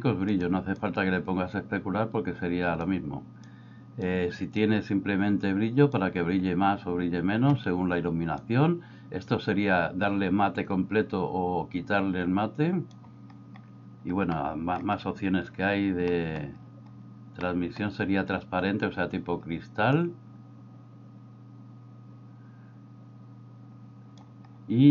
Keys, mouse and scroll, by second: 0.9-2.8 drag, 3.5-4.1 drag, 4.6-5.9 drag, 8.5-13.0 drag, 14.4 middle click, 16.2 middle click, 17.4 middle click, 20.0-24.3 drag.